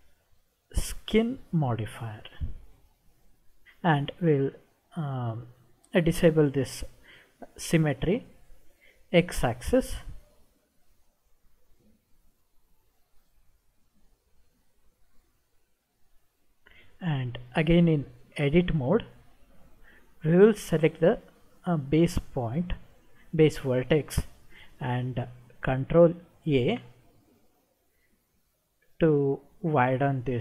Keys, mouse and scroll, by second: 9.6 click, 11.8-14.0 middle drag, 14.6-15.1 scroll up 2, 16.2 scroll up 2, 18.6 Tab, 20.8 click, 26.7 ctrl+a.